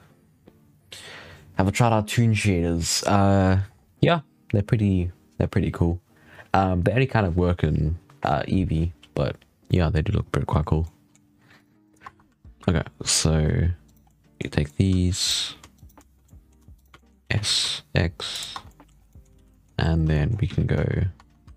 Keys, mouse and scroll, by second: 3.6-4.0 scroll down 5, 4.0-7.6 scroll up 3, 9.6-11.1 middle drag, 11.1-11.4 scroll up 3, 11.4 right click, 11.7 right click, 11.9 Tab, 12.2 3, 12.5 2, 13.7 right click, 14.0-15.1 middle drag, 15.1 shift+right click, 15.6 right click, 16.2 middle click, 16.6 shift+right click, 16.8 middle click, 17.1 s, 18.4 Tab, 18.6 middle drag, 18.8 scroll down 3, 19.0 middle drag, 19.2 alt+a, 19.4-19.7 middle drag, 20.0 shift+middle drag, 20.2 scroll up 5, 20.4 z, 21.2 Tab, 21.3 1.